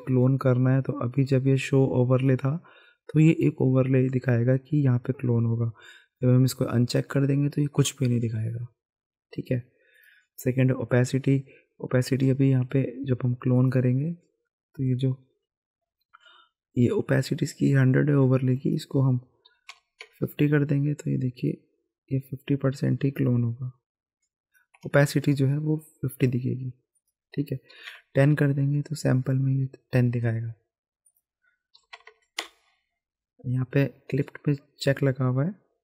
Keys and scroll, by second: 19.5 KP_5, 19.7 KP_0, 20.0 Return, 24.8 ctrl+z, 27.7 KP_1, 27.9 KP_0, 31.8 KP_1, 31.9 KP_0, 32.0 KP_0, 32.4 Return.